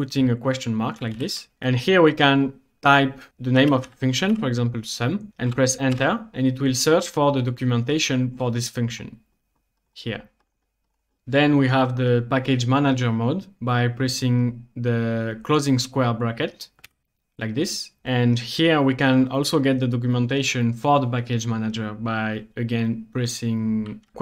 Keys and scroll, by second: 0.9-1.7 typing, 3.4-4.8 typing, 6.0 Return, 16.9 ].